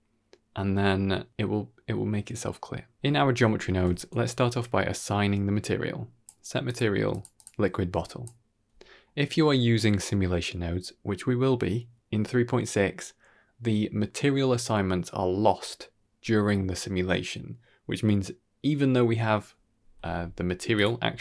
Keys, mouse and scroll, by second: 2.7 middle click, 3.1 middle click, 3.4 middle click, 3.8 shift+a, 6.8-7.3 drag, 7.9 click, 20.2 click.